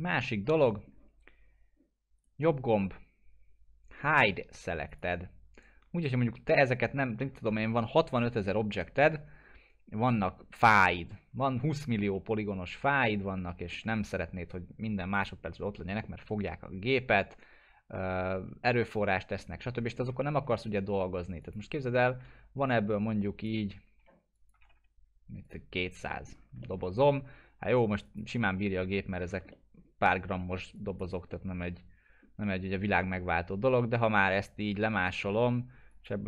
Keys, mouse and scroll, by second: 2.2 right click, 4.9 click, 7.6 ctrl+z, 12.0 ctrl+z, 12.1-14.0 alt+middle drag, 15.1 click, 16.0 scroll up 1, 16.3 scroll down 1, 16.9-19.4 alt+middle drag, 19.9 scroll up 1, 20.4-21.4 scroll down 1, 21.4 click, 21.7 scroll down 1, 21.9 middle click, 22.2 w, 22.7-23.6 shift+drag, 24.3-25.2 typing, 25.4 click, 26.1 middle click, 26.3 scroll down 1, 26.6-27.2 alt+middle click, 27.2-28.0 scroll down 1, 28.0 click, 28.2 click, 28.8 middle click, 28.9-29.2 scroll down 1, 29.5-31.1 alt+middle click, 30.7 click, 31.3-31.9 middle click, 32.6 scroll down 1, 33.8 middle click, 34.0-35.3 shift+drag.